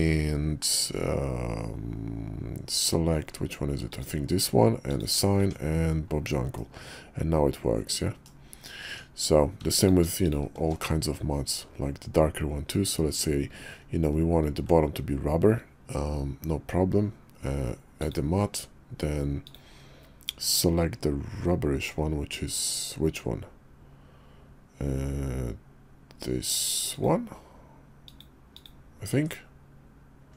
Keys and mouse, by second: 4.9 click, 5.4 Tab, 6.6-8.2 middle drag, 8.8 Tab, 9.8 alt+click, 10.2 alt+shift+click, 18.0 drag, 19.4-27.1 drag, 28.0 click, 28.5 click, 29.1 Tab.